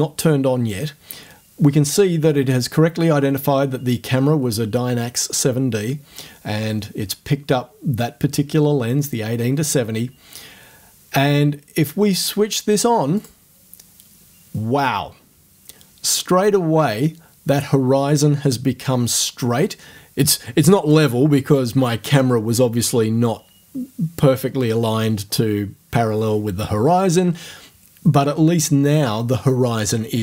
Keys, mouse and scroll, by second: 13.2 click.